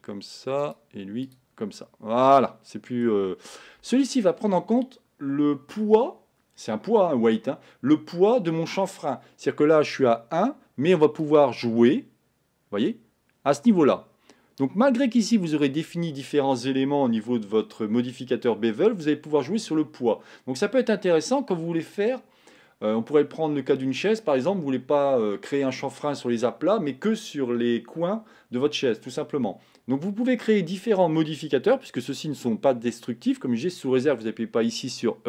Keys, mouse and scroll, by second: 0.0-2.2 drag, 2.2-11.6 middle drag, 11.6-14.3 drag.